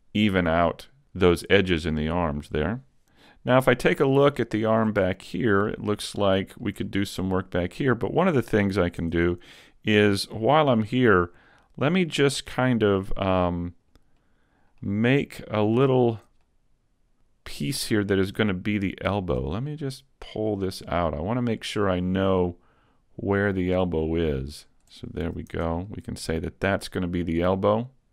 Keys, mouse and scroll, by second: 1.4 middle click, 3.2 middle click, 4.6 shift+middle click, 5.1 middle click, 6.1 middle click, 6.9 shift+middle click, 7.2-7.8 scroll up 1, 7.8 scroll up 1, 8.2 right click, 9.0 Tab, 9.4 middle click, 13.8 right click, 14.2 middle click, 15.2 middle click, 15.8 shift+middle click, 16.5 middle click, 17.3 middle click, 19.2 shift+right click, 19.6 middle click, 22.1 click, 25.3 a, 25.5 Tab, 25.9 middle click.